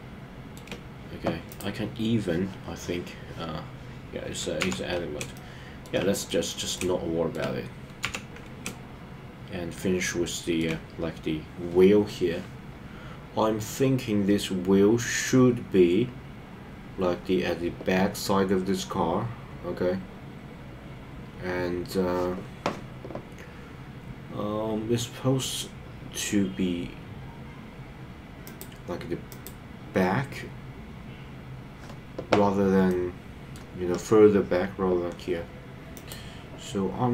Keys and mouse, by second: 1.4 click, 4.5 KP_3, 5.3 shift+middle click, 6.7 shift+middle click, 8.0 KP_3, 8.6-10.6 shift+middle drag, 32.8 middle click.